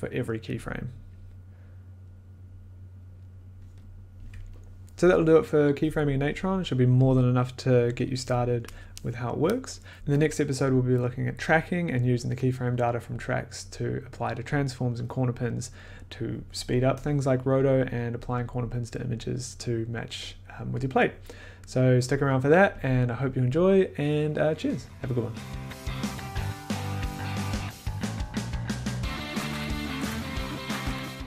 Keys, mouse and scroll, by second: 2.2 click, 3.7-4.8 drag.